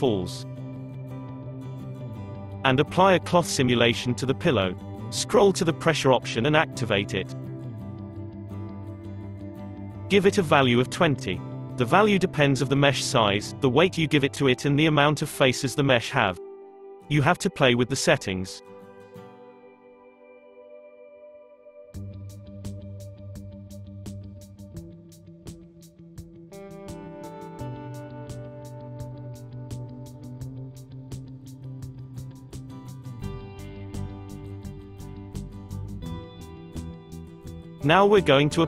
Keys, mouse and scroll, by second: 0.9 click, 1.8 click, 2.7 click, 3.7-8.4 scroll down 16, 8.9 click, 10.0 click, 10.5 click, 16.9 space, 19.9 space, 20.8 space, 23.8 space, 25.3-28.2 drag, 29.1 scroll up 2, 29.4-30.3 middle drag, 30.3-31.6 right drag, 31.6-34.7 middle drag, 36.8 click, 37.8 click.